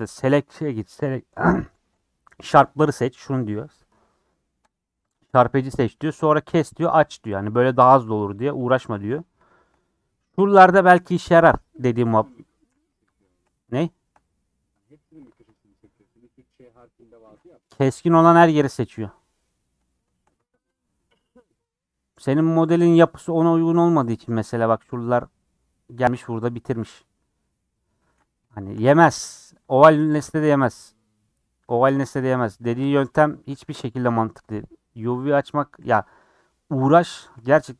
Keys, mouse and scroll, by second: 4.7-6.7 drag, 6.7-7.1 scroll down 1, 8.0 middle click, 8.8-11.1 scroll up 10, 9.4 shift+middle click, 11.8 KP_Decimal, 12.2-12.6 scroll up 4, 12.6-13.0 scroll down 3, 13.2-14.4 shift+middle drag, 14.4-14.8 scroll up 4, 14.8 shift+middle click, 15.7-16.0 scroll up 4, 16.9 scroll down 1, 18.8-20.3 middle drag, 20.3 scroll up 2, 20.6-23.1 middle drag, 23.1 scroll up 1, 24.4 scroll up 1, 24.9-27.3 shift+middle drag, 27.3 scroll down 5, 27.6 middle click, 28.2-28.5 scroll down 4, 28.5 shift+middle click, 28.9-29.2 scroll down 3, 29.2 shift+middle click, 29.7 click, 29.9-30.3 scroll up 6, 30.6 Tab, 30.9 click, 31.1 scroll down 2, 31.3 middle click, 32.2 click, 35.8 /, 36.2 middle click, 36.5 scroll up 1, 37.4 shift+middle click, 37.6 scroll up 2.